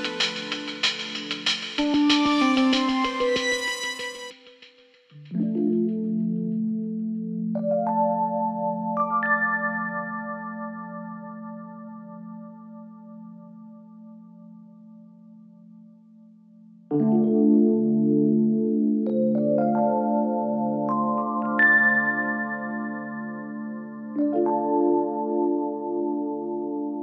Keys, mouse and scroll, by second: 3.4 click, 7.5 click, 8.5-11.2 ctrl+drag, 10.1-10.6 click, 11.9 ctrl+click, 18.9 click, 20.3 ctrl+g, 21.6 click, 23.2 alt+scroll up 1, 25.9 click.